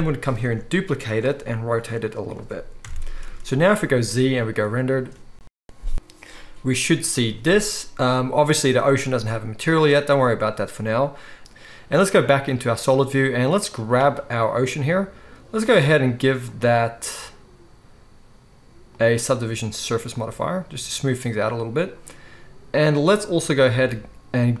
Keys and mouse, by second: 0.4 shift+d, 1.3 r, 2.8 ctrl+middle click, 2.8 KP_0, 3.3 ctrl+s, 3.9 z, 4.4-13.6 middle drag, 11.4 z, 13.6 click, 13.7-15.6 middle drag, 15.6 click, 15.8-16.4 middle drag, 16.4-24.6 drag.